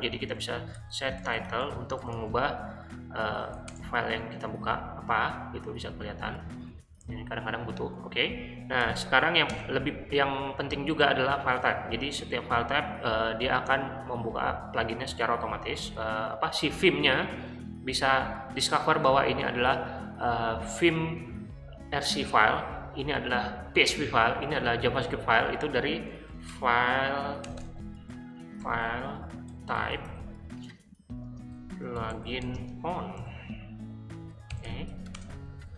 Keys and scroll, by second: 0.3-3.9 typing, 8.8 shift+o, 9.5 Return, 25.8-33.2 typing, 34.2-35.5 typing.